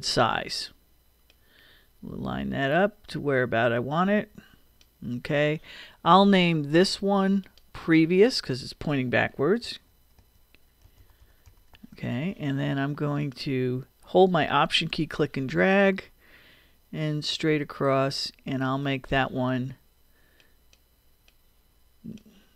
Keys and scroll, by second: 9.3 p, 9.6 r, 11.2 o.